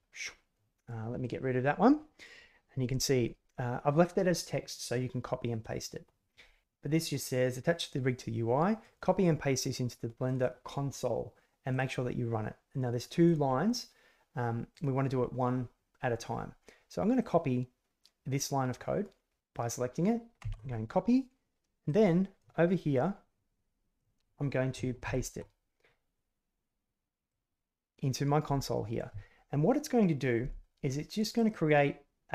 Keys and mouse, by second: 24.1 click, 25.0 ctrl+v, 27.4 click, 28.0 click, 31.3 click.